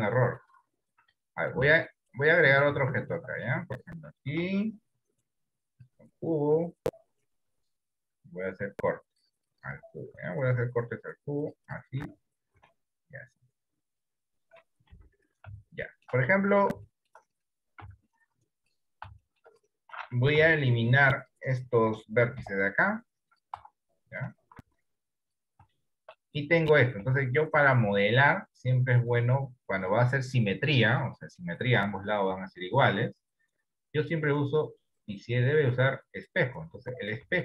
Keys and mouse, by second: 0.2 middle click, 1.4 shift+middle click, 2.4 middle click, 3.0 shift+middle click, 4.3 shift+a, 7.5 Tab, 8.6 ctrl+r, 10.5 ctrl+r, 12.6 ctrl+r, 15.0 KP_1, 15.9 shift+middle click, 17.1 shift+middle click, 17.9 z, 19.5 middle click, 19.7 right click, 20.4 b, 22.3 Delete, 23.6 Tab, 24.1 middle click, 24.6 z, 25.8 shift+middle click, 26.6 middle click, 27.4 shift+middle click, 29.2-36.4 drag, 36.9 middle click.